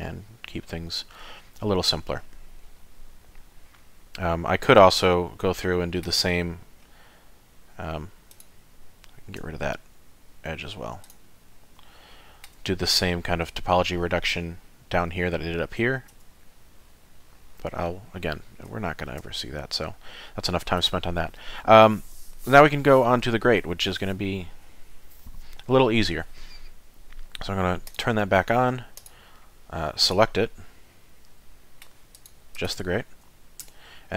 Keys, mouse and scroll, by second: 1.8-2.5 scroll down 4, 2.6 middle click, 6.2-8.3 scroll up 4, 8.3 click, 9.4 x, 11.8 shift+middle click, 15.8 middle click, 16.1 Tab, 16.4 middle click, 17.7-18.1 scroll down 3, 18.1 middle click, 18.8 shift+middle click, 19.2 middle click, 27.9 click, 29.0 click, 30.0 click, 30.9 middle click, 32.1 click, 32.5 click, 33.6 Tab.